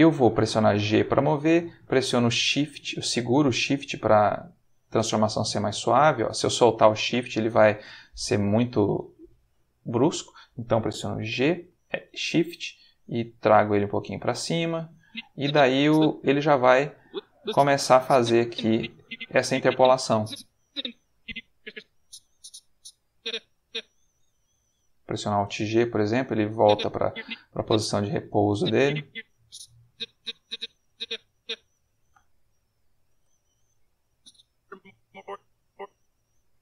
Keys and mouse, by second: 9.9 Escape, 11.3 g, 13.9 shift+click, 14.9-23.5 drag, 25.4 alt+g, 26.5-31.6 drag, 31.9 g, 33.1 shift+space, 34.0-35.6 drag.